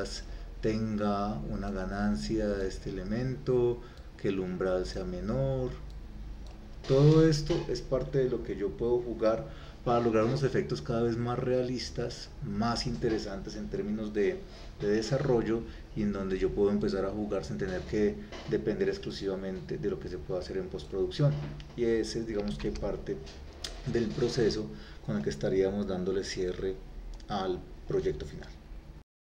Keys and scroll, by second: 22.7 ctrl+s.